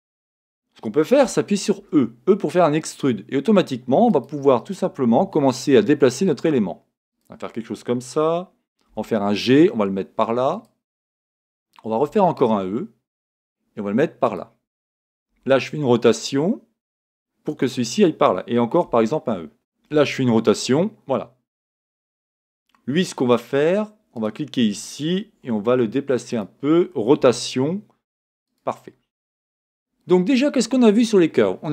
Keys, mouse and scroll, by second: 1.8 e, 4.2 click, 5.2 r, 7.2 click, 8.9 g, 10.6 click, 12.1 e, 14.3 click, 15.3 r, 17.6 click, 18.9 e, 19.9 r, 21.6 click, 23.2 click, 24.1 click, 25.4 g, 26.4 click, 27.2 r, 28.5 click.